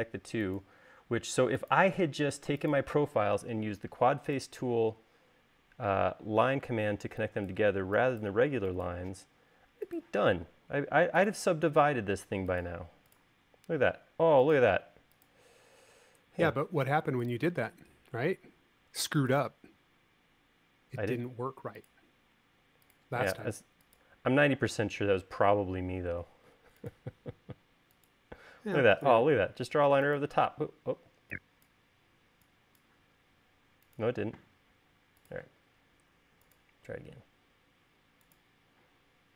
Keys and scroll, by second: 5.9 e, 31.1 e, 32.2 e.